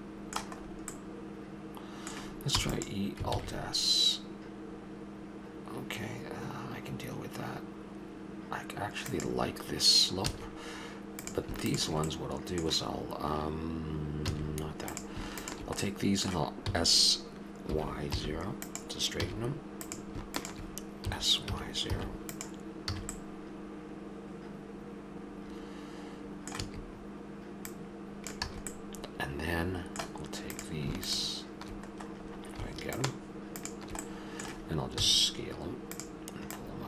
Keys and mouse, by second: 1.0 middle click, 2.5 e, 3.3 alt+s, 10.2 a, 11.2-14.2 drag, 14.2 a, 14.9-16.7 drag, 16.7 s, 19.1 a, 19.8-21.0 drag, 21.0 s, 22.8 a, 24.8 middle click, 26.6 a, 27.6 click, 28.5 a, 28.7-30.5 middle drag, 30.5-31.8 right drag, 34.0-35.4 middle drag, 35.0 s, 36.5-36.8 drag.